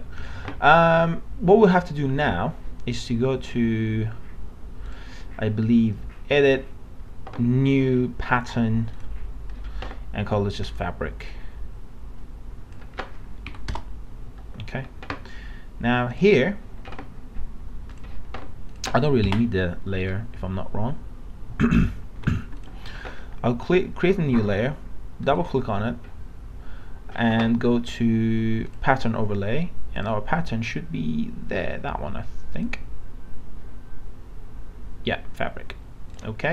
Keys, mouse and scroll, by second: 13.5 Delete, 13.7 Return, 16.1 click, 19.3 Delete.